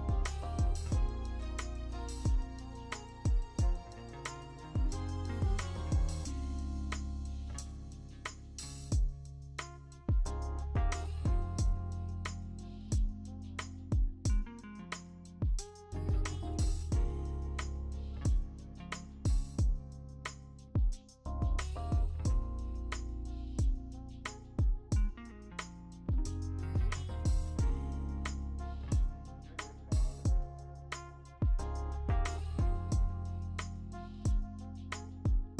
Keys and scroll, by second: 3.5 ctrl+t, 7.9-9.3 typing, 9.1 ctrl+d, 10.6 typing, 12.1 ctrl+z, 12.4 ctrl+d, 13.1 v, 14.5-15.8 typing, 16.5 ctrl+d, 17.7 m, 18.8 ctrl+d, 20.2 ctrl+alt+z, 21.1 ctrl+z, 22.5 ctrl+d, 23.1 e, 25.4 w, 25.9 e, 29.2 ctrl+d, 31.2 v, 34.7 w, 35.4 ctrl+d.